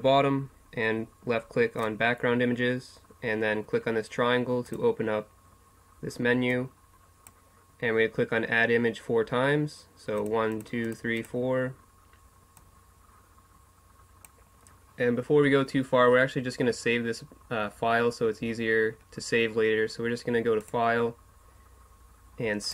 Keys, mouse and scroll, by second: 1.8-3.6 drag, 4.6-8.3 drag, 10.2-14.4 drag, 20.7-22.4 drag.